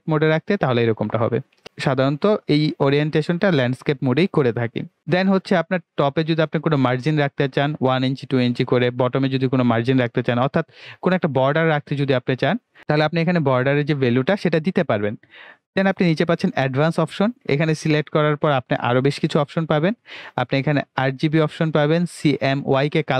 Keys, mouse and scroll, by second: 16.5-22.8 drag.